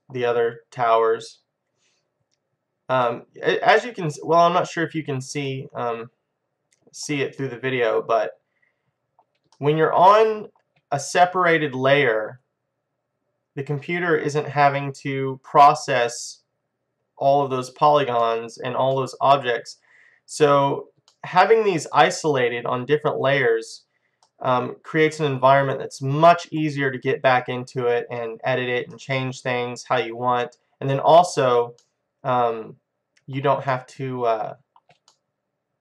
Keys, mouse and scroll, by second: 3.1 middle click, 3.9-7.2 middle drag, 7.4 middle click, 8.0-9.3 middle drag, 9.6-11.6 middle drag, 16.2 middle click, 16.6-23.0 middle drag, 23.0-23.9 scroll up 1, 23.9-24.4 scroll down 1, 24.4-26.2 middle drag, 28.4-30.7 middle drag, 31.9-33.8 middle drag, 34.0-35.8 middle drag.